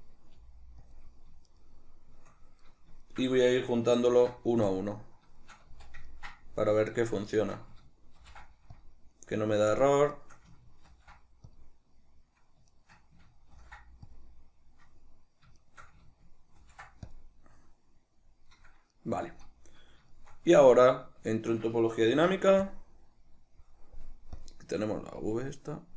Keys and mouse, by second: 0.3 g, 0.9 click, 1.5 shift+right click, 2.6 right drag, 3.0 shift+right click, 4.0 ctrl+shift+b, 5.4-7.3 shift+middle drag, 5.6 z, 7.3 shift+right click, 8.2 ctrl+shift+b, 10.1 shift+right click, 10.9 ctrl+shift+b, 12.7 shift+right click, 13.5 ctrl+shift+b, 15.6 shift+right click, 16.6 ctrl+shift+b, 18.6-24.4 middle drag, 19.3 z, 20.5 Tab, 22.1 ctrl+d, 24.4 click, 25.2 click.